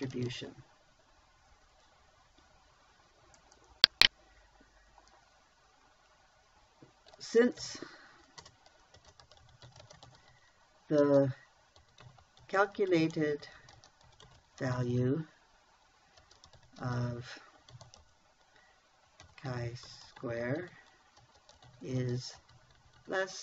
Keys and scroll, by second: 0.0-0.8 typing, 8.1-15.2 typing, 16.6-18.4 typing, 19.7-23.4 typing.